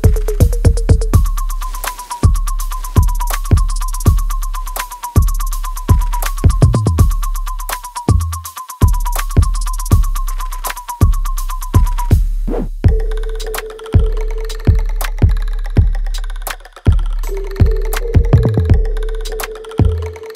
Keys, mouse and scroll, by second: 0.3-4.1 drag, 4.5-6.8 alt+right drag, 6.8-16.8 ctrl+drag, 17.9 click, 19.7 alt+right click.